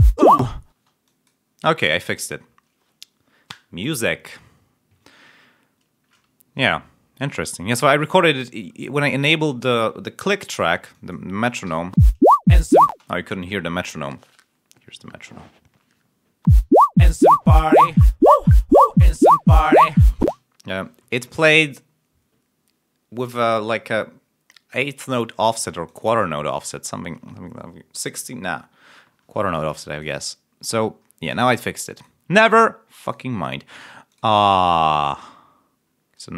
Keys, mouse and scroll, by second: 0.7 space, 1.0 click, 1.5 click, 10.8 click, 11.6 7, 11.9 space, 13.0 space, 16.4 space, 20.1 space, 25.6 click, 26.2 ctrl+scroll up 1, 29.8 click, 31.8 click, 33.0 click, 34.0 click, 34.3 scroll up 2, 34.8 scroll down 2, 36.1 right click.